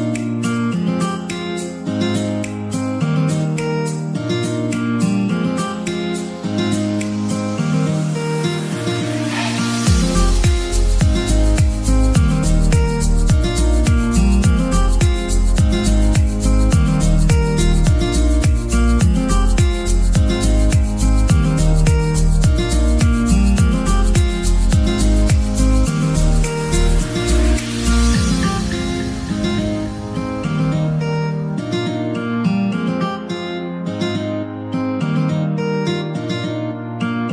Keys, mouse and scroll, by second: 0.1 right click, 1.0 click, 1.1-3.7 right drag, 2.9 click, 3.7 ctrl+z, 4.5 ctrl+z, 4.5 ctrl+z, 5.2-8.4 middle drag, 8.3 Tab, 9.1 ctrl+r, 9.9 Tab, 10.5 ctrl+r, 11.1-13.0 scroll up 1, 13.0 scroll up 1, 13.0 click, 13.4 right click, 13.8 middle click, 14.1 2, 14.5 click, 14.6 click, 16.0-17.7 middle drag, 17.7 KP_7, 18.4 g, 18.7 y, 20.8 click, 22.3-23.8 scroll down 1, 23.8-26.5 drag, 27.2 g, 27.6 y, 32.6 shift+click, 33.4 Tab, 34.1 g, 34.4 y.